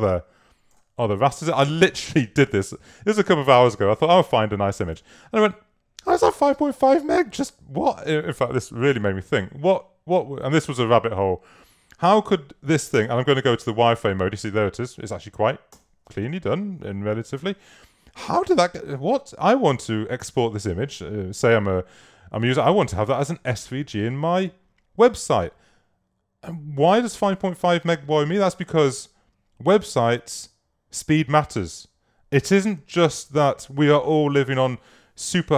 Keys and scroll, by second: 15.8 super+y.